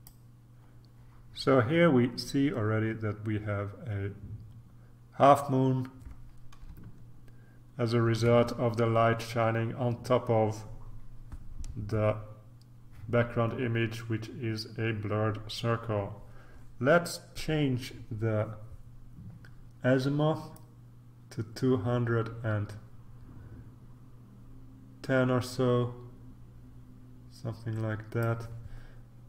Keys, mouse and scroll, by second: 7.1-8.2 ctrl+scroll up 2, 8.2 ctrl+scroll up 1, 20.5-28.8 drag.